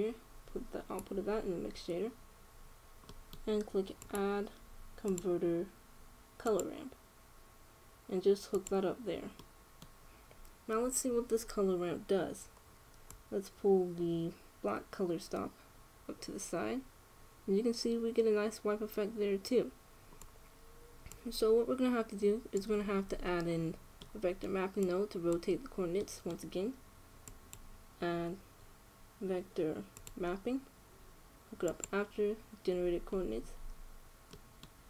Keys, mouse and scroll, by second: 3.8 middle click, 4.7 middle click, 4.7-6.3 drag, 10.0-13.0 middle drag, 13.8-15.8 drag, 21.9-23.7 drag, 23.9 click, 25.6 click, 26.8 click, 27.8 middle click, 27.9-29.8 drag, 33.5-34.8 middle drag.